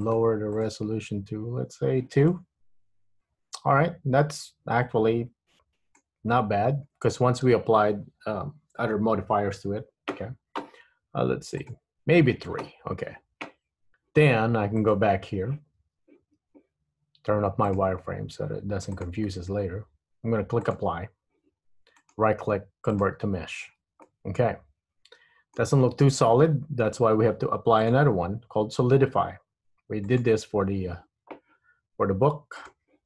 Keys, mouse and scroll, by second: 0.2 click, 0.6 click, 2.5 middle click, 6.4-7.0 scroll up 2, 7.0-7.4 scroll down 1, 11.8 click, 14.9 click, 16.0 Tab, 16.6 Tab, 17.8 click, 20.8 click, 22.1 right click, 23.7 Tab, 24.2 middle click, 25.9 Tab, 28.0 click, 32.7 click.